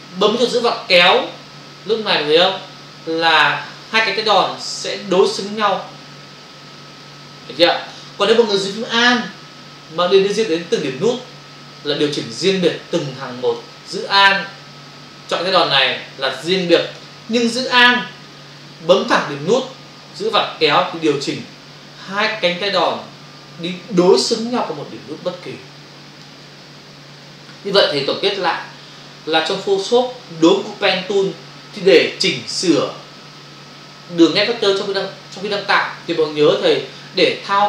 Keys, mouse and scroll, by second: 0.6 alt+click, 11.8 alt+click, 15.7 alt+click, 20.3 alt+click.